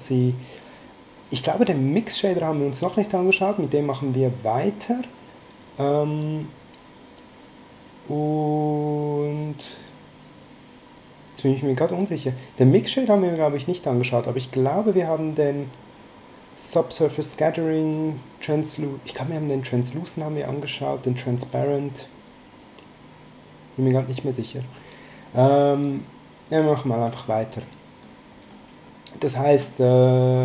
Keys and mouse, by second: 27.6 click.